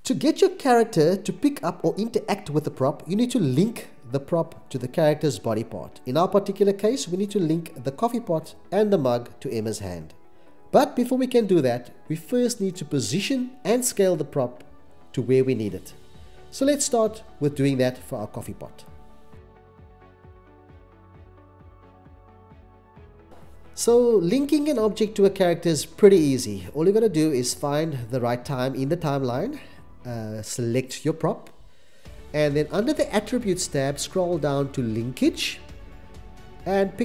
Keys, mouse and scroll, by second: 0.8 x, 1.0 c, 6.6 x, 6.7 c, 7.6 c, 9.9 8, 9.9 0, 10.0 Return, 11.7 x, 11.9 c, 12.0 x, 15.4 x, 15.6 c, 16.4 x, 16.5 c, 18.8-20.9 typing, 19.6 Return, 19.9 Return, 20.5 Return, 22.7-24.1 typing, 23.7 Return, 24.1 Return.